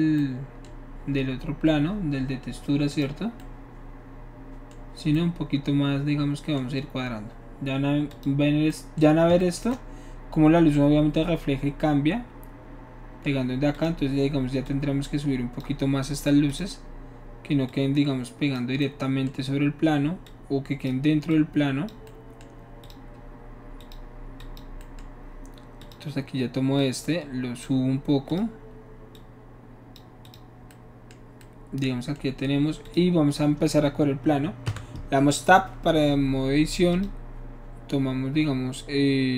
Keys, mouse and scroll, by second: 2.9 click, 8.1 click, 8.7-11.6 middle drag, 13.8 click, 14.7 click, 16.5 click, 17.7 click, 20.3 click, 21.4-21.9 drag, 22.1-22.9 middle drag, 22.9 click, 23.2 middle click, 23.8 click, 24.4 click, 25.9 click, 26.8 click, 28.3 click, 29.2 click, 30.3 click, 32.9 click, 34.7 Tab, 37.0 click.